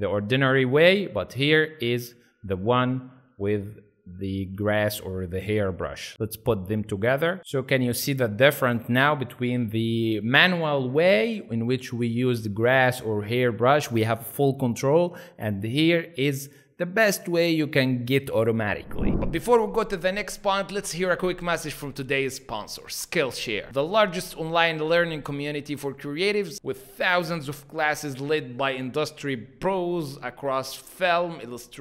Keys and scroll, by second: 3.2 z, 4.4 space.